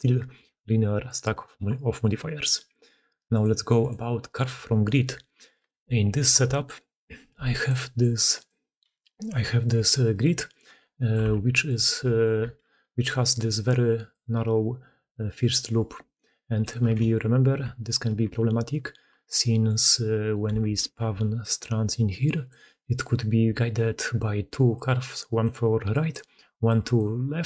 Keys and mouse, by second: 3.7 middle click, 4.7 middle click, 8.9 g, 9.7 h, 10.8 drag, 11.1 Tab, 11.4 click, 11.6 3, 12.5 g, 13.5-13.9 d, 13.9-15.3 drag, 15.3 d, 15.4 d, 15.5 d, 15.9 d, 16.0-16.6 drag, 16.9 ctrl+z, 17.1 ctrl+z, 17.5 ctrl+z, 17.7 ctrl+z, 19.0 Tab, 19.3-19.6 drag, 20.5 alt+a, 21.0 d, 21.2 d, 21.2 d, 22.4 d, 23.4-27.4 d, 24.6 click, 26.8 drag.